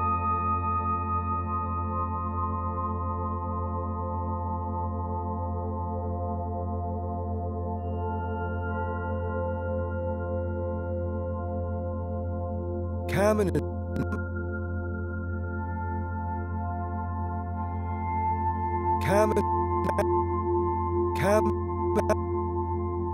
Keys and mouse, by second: 0.9 click, 2.7 click, 3.4 click, 5.1-7.9 drag, 8.7 g, 9.1 z, 10.4 shift+click, 11.7 click, 12.2 space, 13.4-13.9 typing, 13.9-15.5 drag, 15.8 click, 16.8 typing, 17.4-18.1 drag, 18.1 space, 19.2 space, 19.8 click, 20.3 space, 21.3 space, 21.9 click, 22.9-23.1 drag.